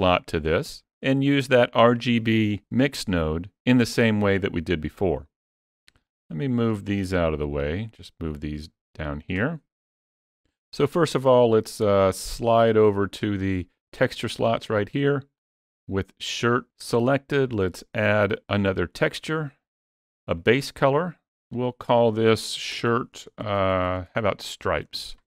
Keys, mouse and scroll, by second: 5.8 click, 6.5 shift+click, 7.4 click, 8.6-9.0 scroll up 3, 9.0 shift+middle click, 11.3 middle click, 15.2 click, 22.6-23.6 typing.